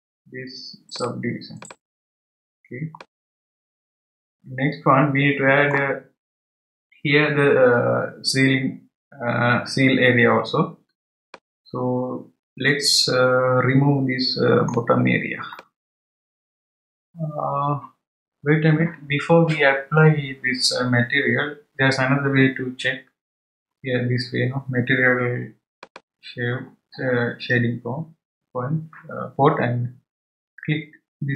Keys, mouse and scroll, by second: 0.9-3.0 drag, 3.0-6.0 middle drag, 11.3-14.3 middle drag, 15.5-16.0 middle drag, 17.5-20.6 scroll up 2, 25.8 click.